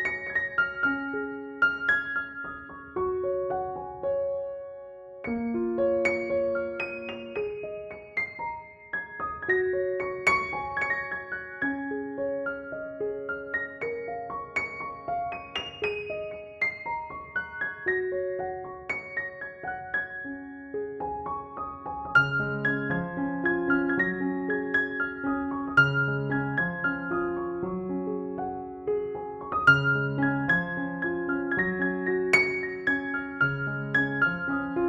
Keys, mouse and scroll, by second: 2.9 ctrl+click, 3.2 ctrl+e, 3.7 click, 4.9 space, 5.1 click, 5.3-6.2 space, 6.2 ctrl+=, 7.7 space, 7.7-8.3 click, 8.3 ctrl+=, 9.3 ctrl+j, 9.7-10.7 typing, 11.8-13.4 typing, 13.1 alt+click, 13.6-14.2 click, 14.2 ctrl+=, 14.7 [, 15.0 [, 15.1 [, 15.5-16.0 click, 16.3 space, 16.9 click, 18.2 [, 18.4-18.9 click, 18.9 [, 19.0-20.5 click, 19.7 [, 19.7 click, 20.7 space, 20.9-21.4 click, 22.0-23.4 drag, 23.8 space, 24.0-24.5 click, 24.5 ctrl+-, 26.4 ctrl+-, 27.2 ctrl+click, 27.7 ctrl+e, 28.2 click, 29.1 ctrl+-, 29.5 space, 29.6-30.2 click, 29.9 space, 30.8 click, 33.3 ctrl+-, 34.1 ctrl+=.